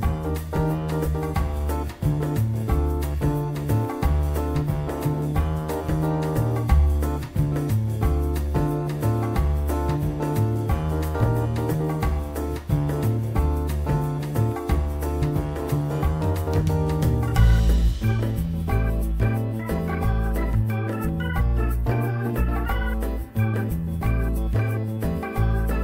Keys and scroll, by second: 2.4 alt+q, 11.2 alt+q.